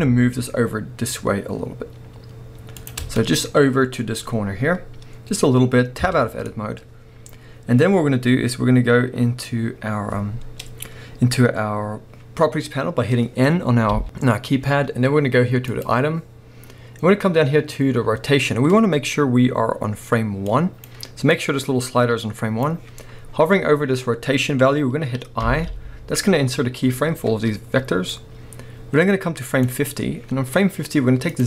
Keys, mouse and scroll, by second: 3.1 scroll down 1, 6.1 Tab, 7.3 scroll up 1, 15.7 click, 20.4-31.4 drag, 25.5 i.